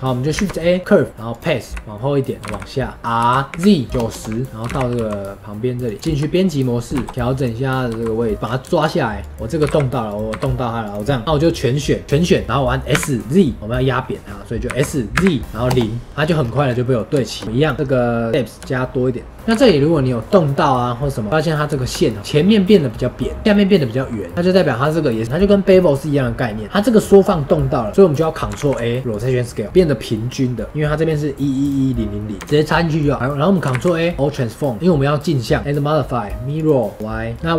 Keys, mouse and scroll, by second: 0.3 shift+a, 0.8 shift+a, 1.7 g, 3.0-6.0 middle drag, 6.0 Tab, 6.2 middle click, 6.9 KP_1, 7.1-8.3 shift+middle drag, 8.3 scroll up 1, 8.4 scroll down 2, 8.6 shift+middle click, 9.1 click, 16.3-17.2 scroll up 5, 17.2-17.7 shift+middle drag, 17.7-18.3 scroll down 10, 18.3-19.3 drag, 19.3 scroll up 3, 19.4 s, 21.3-27.9 middle drag, 27.9 scroll down 2, 28.0-29.6 drag, 29.6-32.3 middle drag, 32.3 Tab, 32.6 scroll down 1, 33.1 click, 33.1-33.6 middle drag, 33.6 ctrl+a, 34.2 scroll down 1, 34.5-35.6 middle drag, 35.6-37.3 drag.